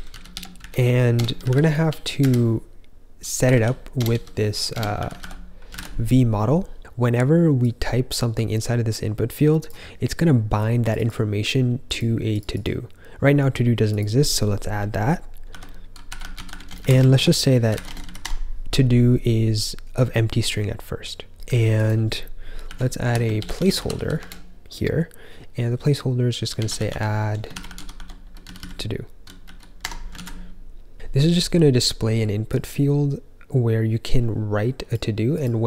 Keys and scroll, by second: 0.0-6.1 typing, 15.4-18.3 typing, 22.6-24.2 typing, 26.3-30.3 typing.